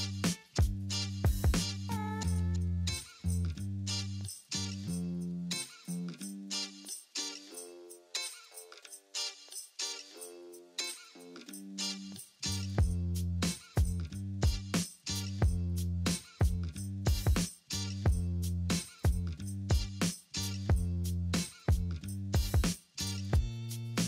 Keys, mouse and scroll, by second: 0.7 alt+q, 1.3 middle click, 4.4 alt+middle click, 6.4 alt+middle click, 8.9 alt+middle click, 9.0 alt+middle click, 18.1 alt+middle click.